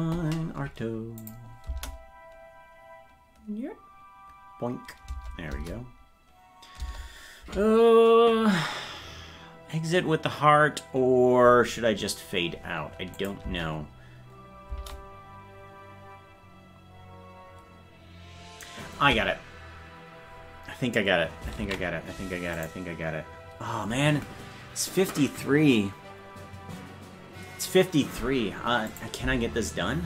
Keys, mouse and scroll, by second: 1.2 click, 1.6 space, 6.2 space, 13.1 click, 13.4 space, 22.5 click, 28.9 click, 29.2 space.